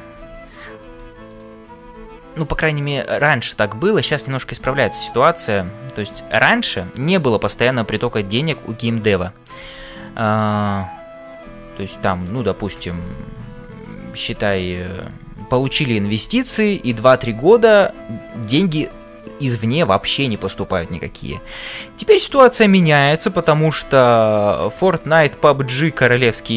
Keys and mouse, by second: 0.2 f, 0.9 f, 1.9 g, 4.0 click, 4.6 g, 5.4 click, 7.2 click, 8.0 g, 9.0 click, 9.6 g, 22.4 shift+middle click, 22.8 middle click.